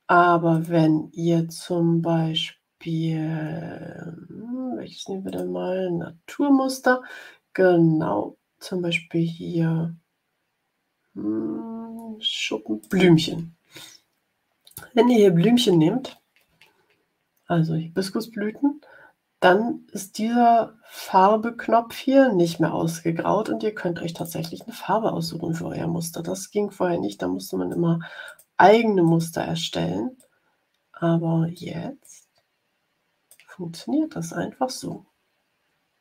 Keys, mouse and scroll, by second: 0.5 click, 5.2 click, 12.7 click, 24.1 click, 27.0 click, 28.2 click, 29.0 click, 30.1-31.6 drag, 31.9-33.4 drag.